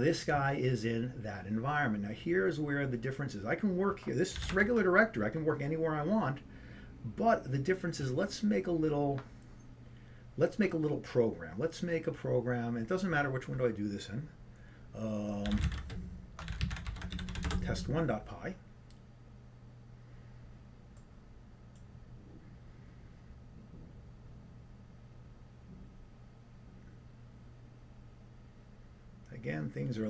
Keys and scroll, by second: 4.4 typing, 15.7 typing.